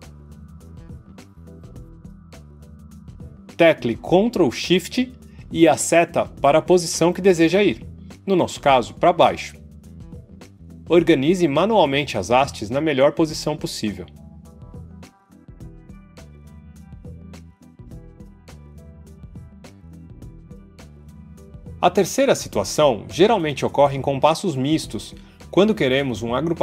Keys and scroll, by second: 6.3 ctrl+shift+Down.